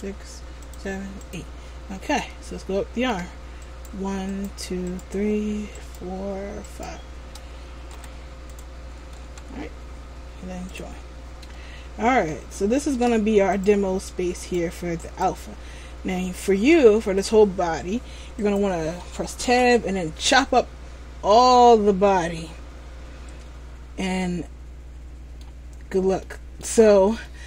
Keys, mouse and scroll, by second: 2.4 shift+middle click, 3.8 right click, 4.5 shift+right click, 5.0 right click, 5.9 right click, 6.8 shift+right click, 8.0 g, 9.4 ctrl+z, 10.8 click, 11.6 scroll down 4, 12.4 shift+middle click, 13.7 right click, 14.5 shift+right click, 15.2 right click, 16.2-16.8 scroll down 1, 16.8 shift+middle click, 16.8 scroll down 1, 18.5 right click, 19.6 Tab, 22.5 middle click, 25.9 scroll down 2, 26.3 middle click, 26.9 scroll up 1.